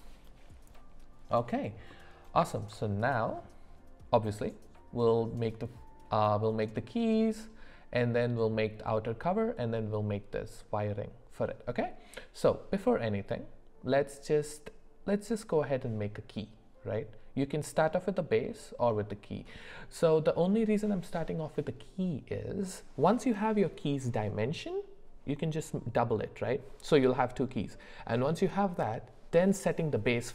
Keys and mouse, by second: 1.9 middle click, 2.8 shift+middle click.